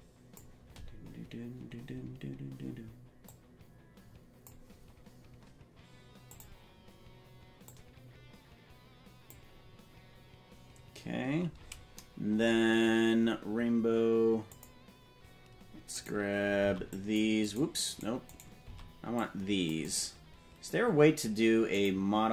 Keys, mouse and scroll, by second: 3.3-4.6 drag, 6.4 click, 14.5 click, 15.9 right click, 16.5 c, 17.8 right click, 18.2 right click, 18.6 c, 21.7 click.